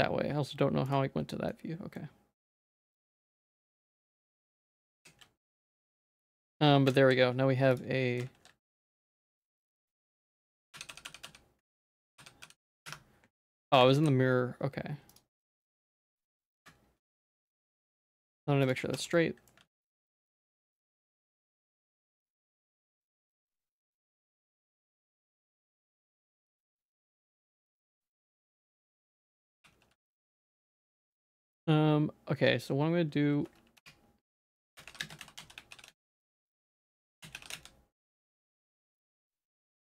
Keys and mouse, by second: 0.9 click, 1.3 middle click, 2.0-3.4 middle drag, 3.6 Tab, 3.8 middle click, 4.6 ctrl+s, 4.8 Tab, 5.2 alt+x, 10.4 middle click, 13.4 middle click, 13.9 alt+s, 15.4 middle click, 16.4 g, 19.0 Tab, 19.1 middle click, 19.7 ctrl+s, 20.0 middle click, 20.4 Tab, 20.5 middle click, 21.3 middle click, 21.6 ctrl+z, 21.8 ctrl+z, 22.0 ctrl+z, 22.5 middle click, 22.9 Tab, 23.2 z, 23.5 middle click, 24.0 z, 24.3 Tab, 24.5 middle click, 25.3 ctrl+t, 26.3 a, 28.2 alt+s, 29.6 ctrl+t, 30.7 ctrl+s, 30.9-32.9 drag, 33.9 F3.